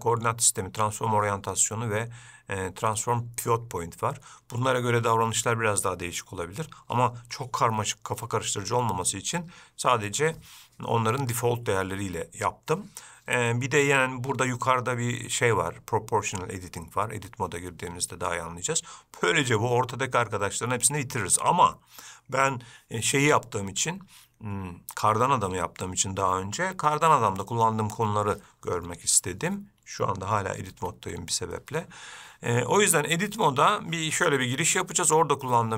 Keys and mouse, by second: 31.0 Tab.